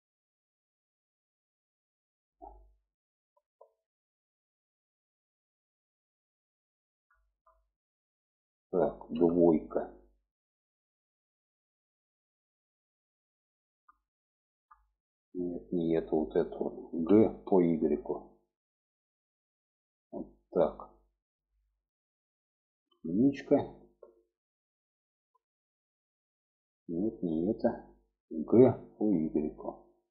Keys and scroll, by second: 8.4 2, 16.3 g, 22.2 1, 27.8 g.